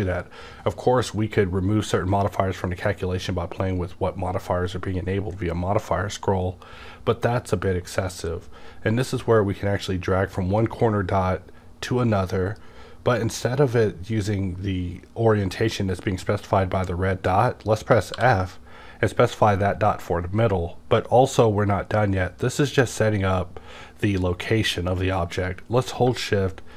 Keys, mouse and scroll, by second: 9.0-18.1 drag, 18.3-26.7 drag, 18.3 f.